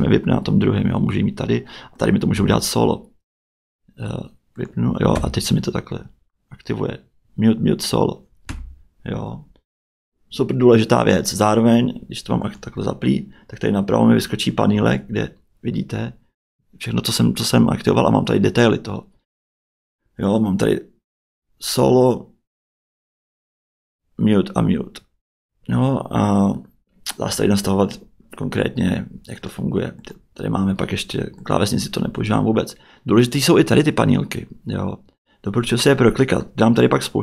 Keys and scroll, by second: 2.3 q, 5.1 q, 8.5 q.